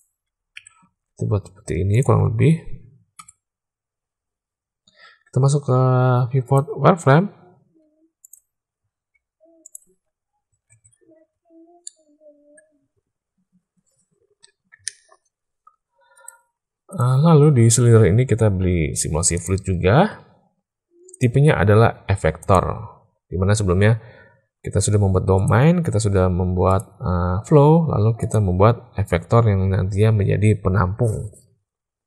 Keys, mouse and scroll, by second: 0.5 e, 2.0 Tab, 3.1 /, 6.4 click, 7.7 z, 9.1 z, 10.6 alt+a, 11.8-12.5 drag, 16.1 click, 19.4 click, 21.0-22.5 drag, 26.6 click, 28.1 click.